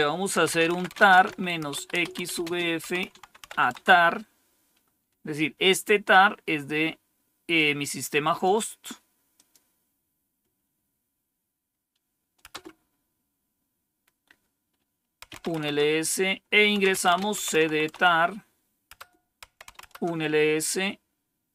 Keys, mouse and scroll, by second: 0.1-3.9 typing, 7.5 click, 9.3 click, 12.4 Return, 14.9-20.1 typing.